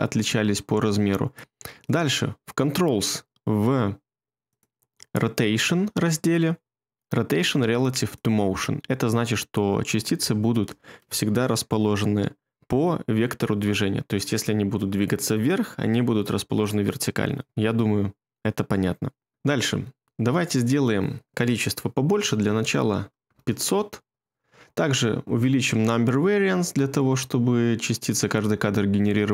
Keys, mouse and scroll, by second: 22.2 typing, 23.2 Return.